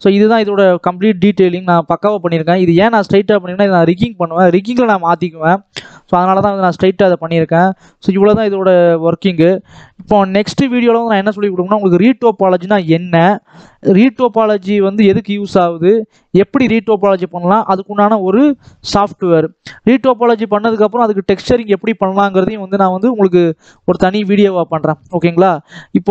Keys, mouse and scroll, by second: 0.0 scroll down 1, 0.1-2.3 middle drag, 2.3-2.6 scroll up 2, 2.6-3.0 scroll down 1, 3.0-6.1 shift+middle drag, 6.1-6.7 scroll up 2, 6.7 scroll down 1, 6.9 middle click, 7.3 scroll down 1, 7.6-8.8 middle drag, 8.8-9.1 scroll down 2, 9.1 middle click, 9.7-10.3 scroll up 1, 10.3-18.9 middle drag, 18.9 scroll up 2, 19.0 shift+middle click, 19.5-20.0 scroll up 1, 20.0-20.4 scroll down 1, 20.4 middle click, 20.8-22.3 scroll down 1, 22.3 shift+middle click, 22.5 n, 23.1 scroll up 1, 23.2 middle click, 23.8-24.1 scroll down 2, 24.1-26.1 middle drag.